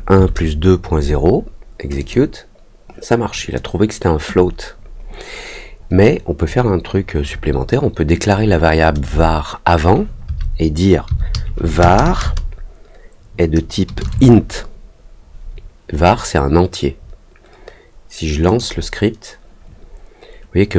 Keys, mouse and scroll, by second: 1.9 click, 8.2 click, 18.4 click.